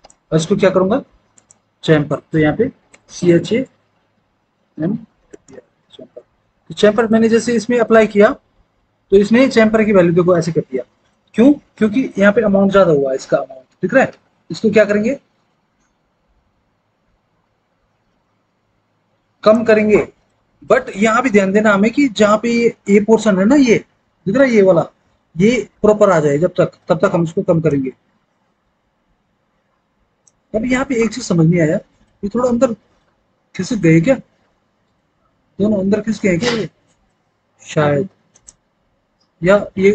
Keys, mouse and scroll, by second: 0.1 ctrl+z, 2.6 typing, 8.2 F4.